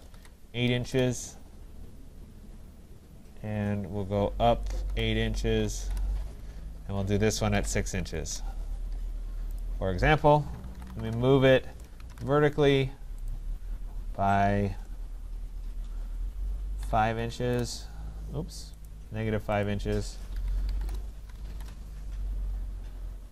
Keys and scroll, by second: 0.8 Return, 17.4 Return.